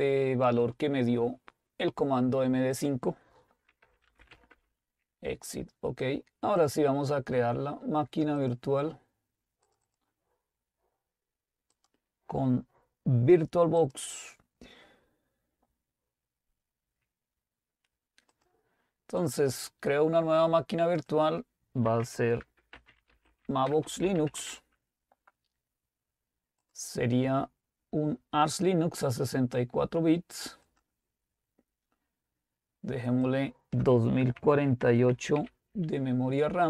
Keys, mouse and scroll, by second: 2.8-3.8 drag, 3.6-4.8 typing, 6.6 click, 8.9-11.1 drag, 11.9 click, 14.1 click, 18.3-20.0 drag, 21.6 click, 22.0-26.8 typing, 26.7 click, 29.1 click, 30.6 click, 33.8 click, 34.1-35.9 typing.